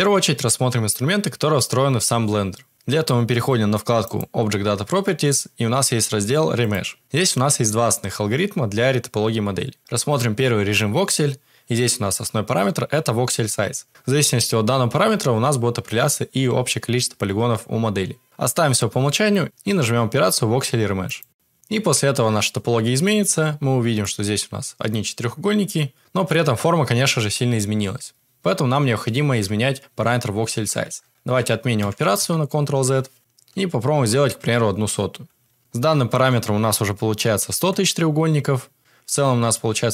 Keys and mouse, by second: 4.1 click, 6.6 click, 23.0 Tab, 24.0 middle click, 30.8 ctrl+z, 31.1 ctrl+z, 31.3 ctrl+z, 31.7 ctrl+z, 32.3 ctrl+z, 33.2-34.6 drag, 35.6 Tab, 35.8 Tab, 39.5 middle click.